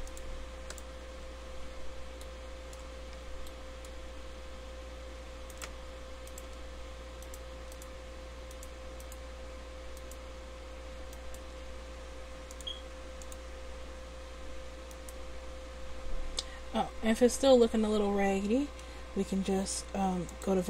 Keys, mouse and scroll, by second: 0.1-3.0 drag, 1.3 Tab, 3.0 Tab, 13.4-14.9 drag, 14.9-16.9 right drag, 20.3-20.6 drag.